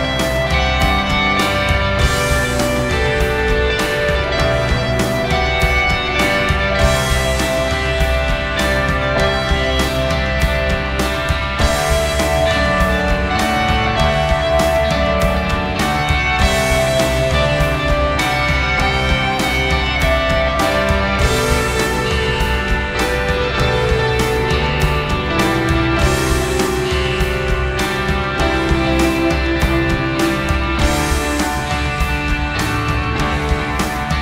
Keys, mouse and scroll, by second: 0.3 Tab, 1.5 Tab, 1.8 Tab, 2.1 ;, 5.6 Tab, 5.9 Tab, 17.3 alt+c, 20.2 alt+c, 21.0 ', 25.0 middle click, 25.2-27.4 middle drag, 27.4 click, 28.8 click, 29.4 BackSpace, 30.4 ctrl+alt+shift+z.